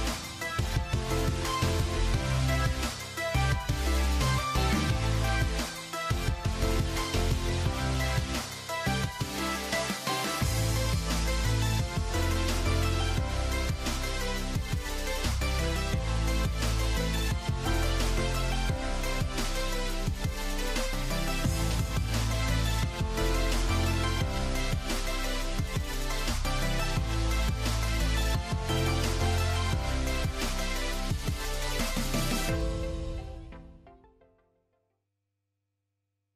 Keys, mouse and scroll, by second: 3.4 shift+a, 4.5 click, 6.6 click, 10.6-13.8 drag, 13.8 a, 14.5 s, 15.4 click, 16.0 g, 18.2 s, 19.5 g, 22.8 click, 23.3 click, 24.4 KP_0, 25.8 Tab, 26.2 click, 26.8 click, 29.8 click, 32.3 click, 33.8 click.